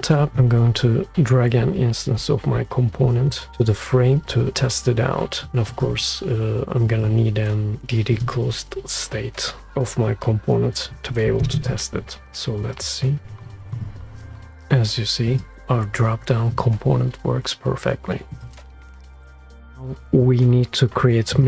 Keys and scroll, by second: 12.3 shift+space.